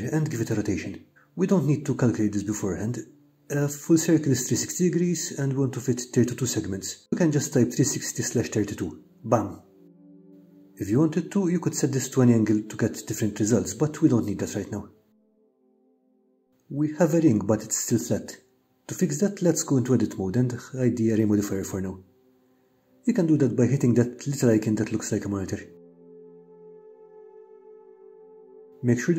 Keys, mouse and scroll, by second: 0.8 click, 4.2-10.6 drag, 12.3-15.6 drag, 16.6 click, 18.1 Tab, 20.6 click, 21.4-22.5 middle drag, 23.2 shift+middle click, 27.6 e, 28.3 1.